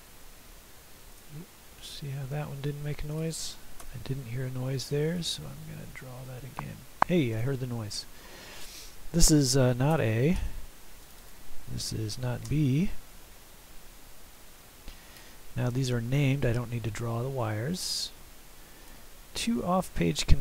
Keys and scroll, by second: 3.9 Delete, 9.7 /, 9.8 a, 12.2 /, 12.3 b, 14.1 typing.